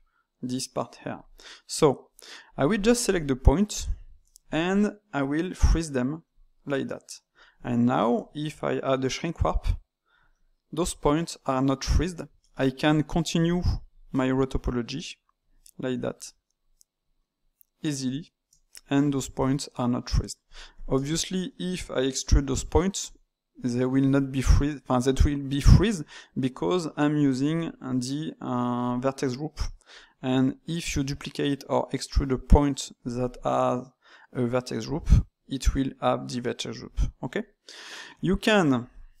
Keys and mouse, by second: 1.1-2.5 drag, 2.7 shift+click, 3.0 shift+click, 3.3 shift+click, 3.7 shift+click, 6.3-7.7 drag, 7.7-9.4 shift+middle drag, 9.4 click, 10.3-13.4 middle drag, 13.4 click, 13.6 shift+click, 13.8 shift+click, 14.5-15.5 ctrl+right drag, 15.5 middle click, 16.2 ctrl+right click, 16.7 ctrl+right click, 17.1-20.4 middle drag, 20.4 click, 20.7 shift+click, 21.0-22.4 ctrl+shift+middle drag, 22.4 e, 26.0-27.2 middle drag, 27.2 click, 37.3-38.9 middle drag, 38.9 click, 39.1 shift+click.